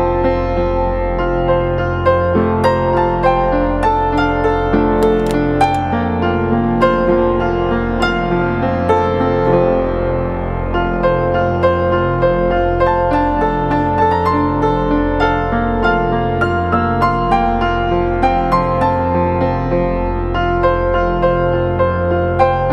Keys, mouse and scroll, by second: 8.4 double click, 12.3 e.